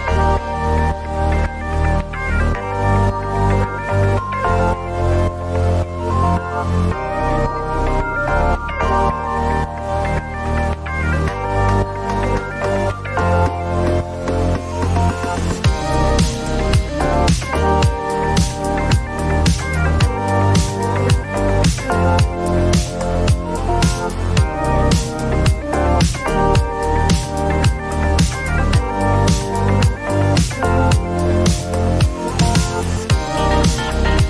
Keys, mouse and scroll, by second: 2.5 Up, 3.0 Up, 3.1 Up, 3.3 Up, 3.4 Up, 3.5 Up, 3.7 Up, 5.7 Up, 5.7 click, 6.6 ctrl+d, 9.3 click, 11.0 click, 12.7 click, 16.1 click, 17.9 click, 22.1 click, 22.3 click, 25.1 click, 27.1 click, 29.5 click, 32.5 click, 33.9 click.